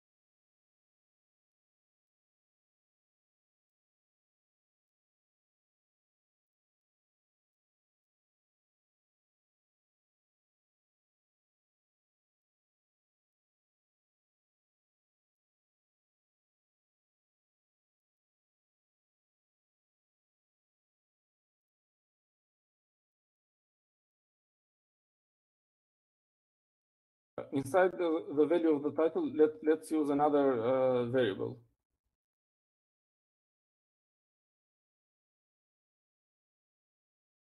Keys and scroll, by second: 0.0 Down, 0.5 Right, 0.6-1.3 Right, 1.5 Right, 2.5 Right, 2.6 Right, 3.1 Right, 3.5 Right, 4.1 BackSpace, 4.5 BackSpace, 21.5-22.8 typing, 26.1 Up, 26.5 Up, 28.1 Up, 28.6 Up, 30.1 Up, 30.5 Right, 30.6-31.1 Right, 31.3 Right, 31.5 Right, 31.6 Right, 32.1 Right, 32.5 Right, 32.6 Right, 33.1 Right, 33.3 Right, 34.0 Right, 34.5 Right.